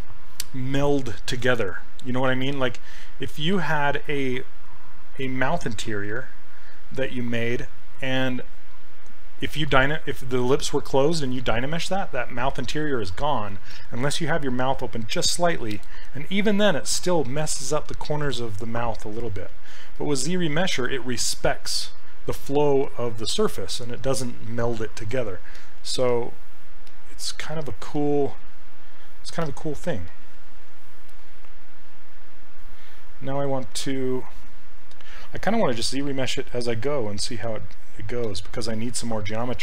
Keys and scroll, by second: 33.0 ].